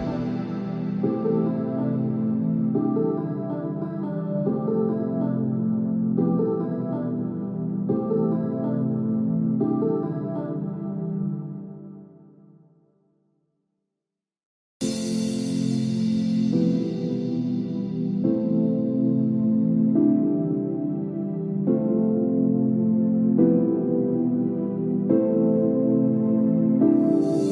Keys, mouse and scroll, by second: 1.0-2.0 scroll down 4, 2.4 middle click, 4.0 middle click, 5.2 KP_1, 6.3-6.7 scroll down 2, 6.7 shift+middle click, 7.0-7.8 scroll up 7, 7.8 shift+middle click, 8.3 click, 10.1 Delete, 10.1 click, 12.0 scroll down 4, 12.3 middle click, 13.3 shift+middle click, 13.7 middle click, 14.7 KP_7, 15.1-15.6 scroll up 6, 15.6-16.1 scroll down 4, 16.1 shift+middle click, 18.2 Tab, 18.9-19.3 scroll down 2, 19.3-20.2 scroll up 4, 20.2-20.9 scroll up 8, 20.9-21.6 scroll down 16, 22.3 middle click, 23.5 click, 27.1 click.